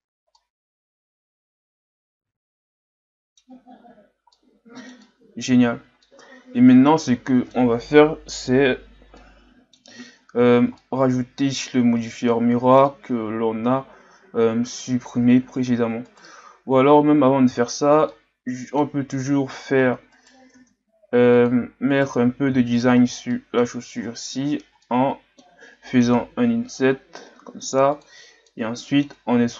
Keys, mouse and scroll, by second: 0.1-0.4 scroll down 1, 0.4-3.4 middle drag, 3.7-4.3 scroll down 5, 4.3-5.5 middle drag, 5.5-6.1 scroll up 3, 6.1-9.0 middle drag, 9.2-10.0 middle drag, 10.0-10.5 scroll up 2, 10.5 scroll down 3, 10.8-13.1 middle drag, 13.1-13.8 scroll up 1, 13.8-14.7 scroll down 1, 14.7 KP_3, 15.6-16.1 scroll up 1, 16.1 right click, 16.5-16.9 scroll up 2, 16.9 Tab, 17.6-18.1 shift+scroll up 2, 18.1-19.5 middle drag, 19.5-19.9 ctrl+scroll up 2, 20.1 right click, 20.5 ctrl+Tab, 21.9 right click, 22.7 shift+right click, 23.0-23.3 scroll down 4, 23.3 middle click, 24.0-24.8 scroll up 6, 24.8-26.5 middle drag, 26.5 i, 28.5-29.5 middle drag.